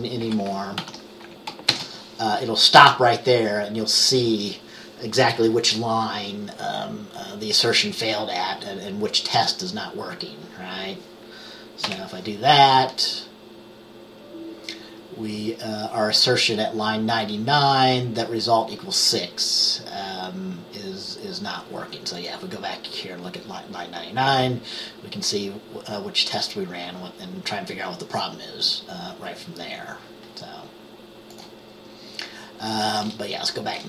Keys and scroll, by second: 0.4 6, 0.9 ctrl+s, 1.8 ctrl+b, 12.0 F5.